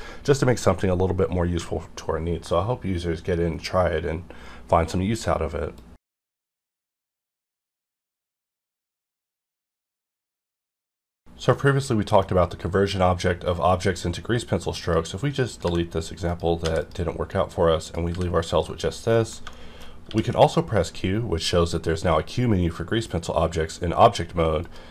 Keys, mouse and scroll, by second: 0.6 click, 14.8 click, 15.6 x, 16.3 click, 16.6 x, 16.8 click, 17.3 middle click, 17.8 click, 18.1 g, 18.6 right click, 18.8 scroll down 1, 19.1 middle click, 19.5 shift+middle click, 20.1 q, 24.6 click.